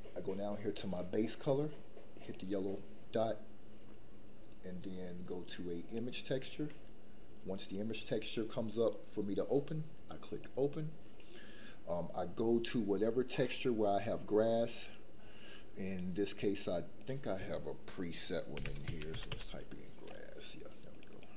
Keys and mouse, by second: 2.2 click.